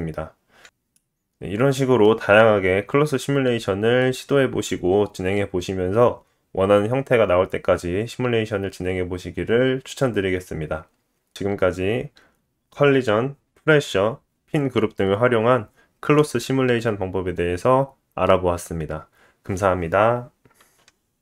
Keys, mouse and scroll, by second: 1.9 click, 2.0 middle click, 4.1-4.9 scroll up 1, 5.0 middle click, 5.0-5.4 scroll up 1.